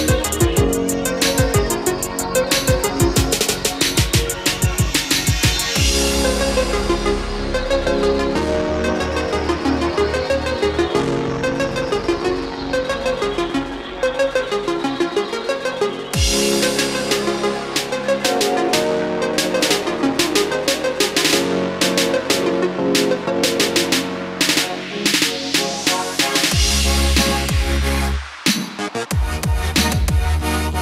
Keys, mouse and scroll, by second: 0.7 KP_1, 5.0 click, 8.7-11.2 middle drag, 14.2 click, 14.7 middle click, 16.1-20.4 drag, 29.0 KP_8, 30.1 Tab.